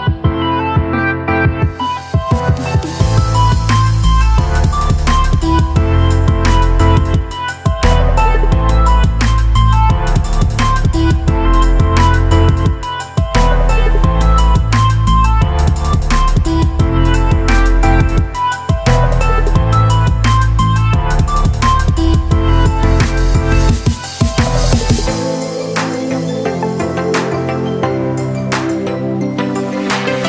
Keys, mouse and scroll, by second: 1.1 click, 6.8 click, 7.3 space, 9.1 click, 9.9 space, 10.1-13.4 ctrl+drag, 18.6-22.4 drag, 22.4 click, 24.7 click, 27.4 alt+space, 27.5 alt+click, 27.9 alt+space, 29.0 space.